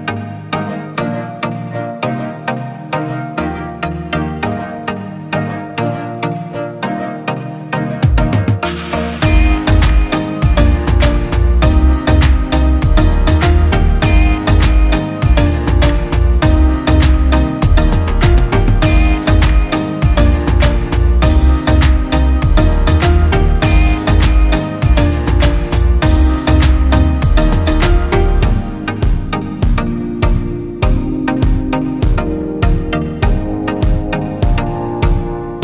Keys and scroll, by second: 17.4 i, 29.7 i.